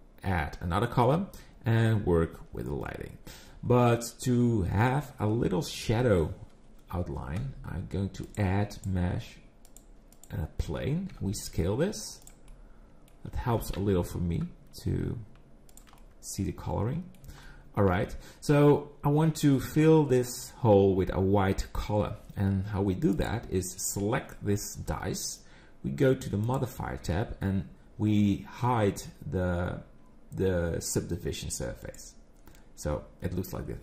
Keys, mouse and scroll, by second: 5.9 KP_7, 8.2 click, 10.7-11.1 scroll down 3, 11.1 s, 12.5 middle click, 13.3 scroll up 3, 13.5 g, 16.0 middle click, 17.4 shift+middle click, 18.2 scroll up 3, 23.1 click, 26.5 click, 31.8 click.